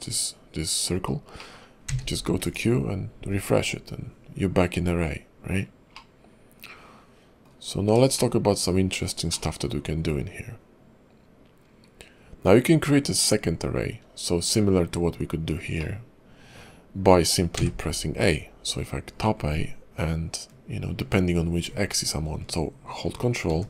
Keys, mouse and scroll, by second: 1.4 middle click, 1.9 q, 5.9 middle click, 7.7-8.0 scroll down 2, 8.2 shift+middle click, 8.8-9.2 scroll up 2, 9.3 shift+middle click, 13.9 scroll down 2, 15.8 middle click.